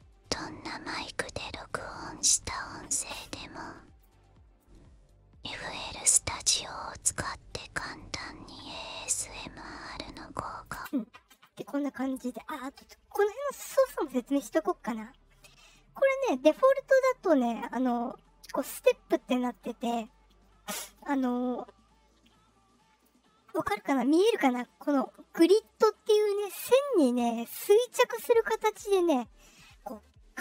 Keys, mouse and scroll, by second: 1.7-2.4 drag, 3.0 click, 4.5-7.7 drag, 9.0 click, 10.0 click, 10.7 space, 14.2-17.5 drag, 19.4-23.0 drag, 27.3-30.4 drag.